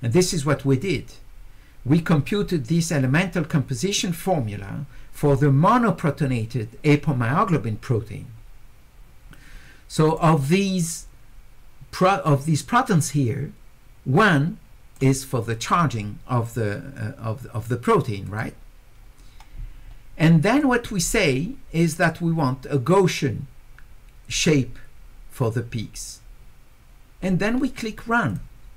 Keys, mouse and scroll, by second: 10.1 click, 14.2 click, 18.3 click, 20.6 click, 28.3 click.